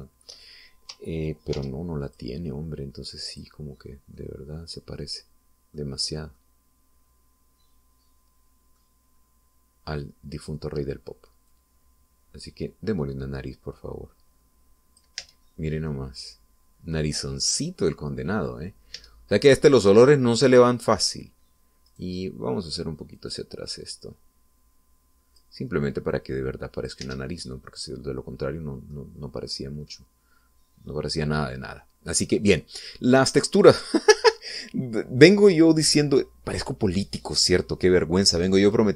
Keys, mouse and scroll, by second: 2.7 ctrl+r, 3.3 ctrl+click, 4.5 click, 5.3-7.1 middle drag, 7.5-10.1 middle drag, 10.3-10.6 scroll up 1, 11.5 right click, 12.7-16.4 drag, 16.4 Tab, 16.9 scroll down 1, 17.1-18.3 middle drag, 18.5-19.7 middle drag, 20.1 Tab, 21.1-22.3 middle drag, 23.1 right click, 23.4 middle click, 24.3-26.7 drag, 27.3 click, 28.2 Tab, 28.6-30.3 middle drag, 30.3 scroll up 2, 30.7 middle click, 31.5-31.8 scroll up 2, 31.9 scroll down 2, 32.5 middle click, 33.2-33.6 scroll down 2, 33.7-34.8 middle drag, 34.8 scroll down 2.